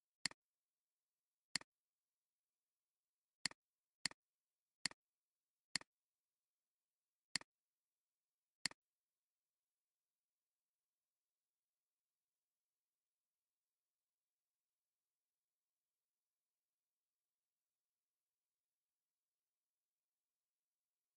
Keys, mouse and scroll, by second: 1.5 alt+shift+click, 3.8 space, 5.7 alt+shift+click, 7.3 alt+shift+click, 8.1 alt+scroll down 1, 8.5 space.